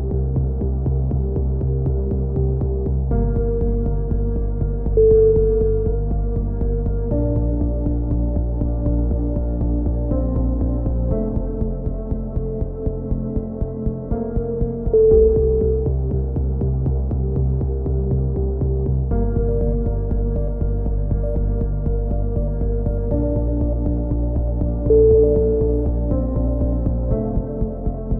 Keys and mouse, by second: 0.1-1.8 drag, 0.8 right click, 2.7 a, 3.0 c, 4.4 click, 5.3-6.6 middle drag, 5.8 a, 6.3 z, 7.2 Tab, 7.6 click, 7.9 z, 12.6-14.0 drag, 13.5 Tab, 14.0 middle click, 16.9 middle click, 17.7 click, 26.1 KP_3, 27.8-28.1 drag.